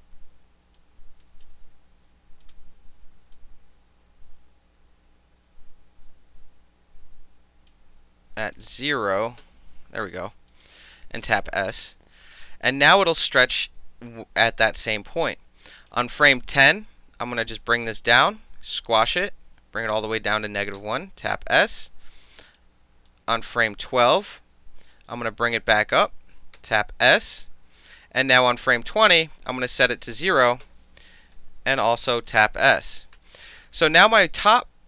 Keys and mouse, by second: 0.8-1.4 drag, 2.4 click, 3.3-7.7 drag, 8.6 click, 9.2 KP_0, 9.4 KP_Enter, 10.5 alt+click, 11.4 s, 12.7-15.9 drag, 17.8-19.1 drag, 20.8 s, 21.7-22.6 drag, 23.1-23.9 drag, 25.1-26.1 drag, 26.6 s, 28.0-28.7 drag, 29.7 click, 30.4 KP_0, 30.6 KP_Enter, 32.3 alt+middle click, 33.1 s.